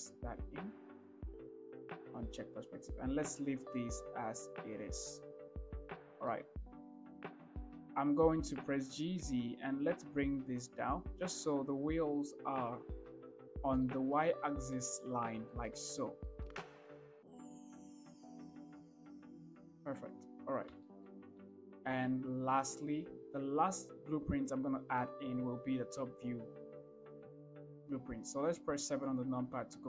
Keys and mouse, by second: 0.1 ctrl+v, 2.5 click, 6.4 shift+middle click, 7.9 shift+middle click, 9.0 g, 9.5 z, 14.1-14.4 shift+drag, 15.0 shift+middle drag, 15.8 shift+middle click, 16.6 shift+middle drag, 18.0 g, 18.4 z, 21.1 shift+middle drag, 21.8 shift+middle click.